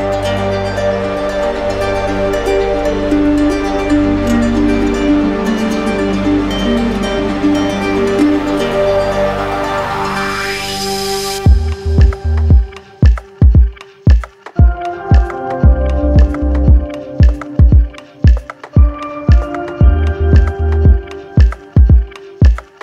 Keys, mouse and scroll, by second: 1.5 click, 2.7 click, 3.5 alt+click, 3.9 right click, 7.5 click, 8.5 click, 10.0-11.1 right drag, 11.9-12.9 drag, 17.1-18.2 drag, 19.4-20.4 drag, 21.9 click, 22.5 click.